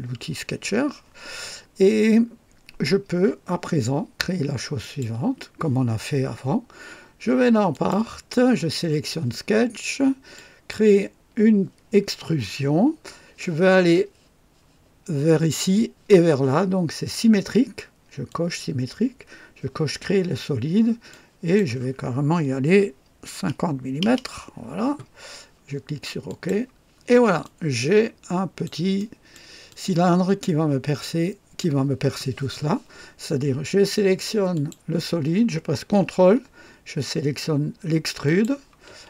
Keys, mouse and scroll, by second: 4.8 click, 7.7 click, 10.3 click, 18.2 click, 21.0 click, 22.6 KP_5, 24.0 KP_0, 26.2 click, 27.4-28.8 drag, 28.9 right click, 29.6-31.7 drag, 30.5 typing, 34.5 click, 38.2 ctrl+click.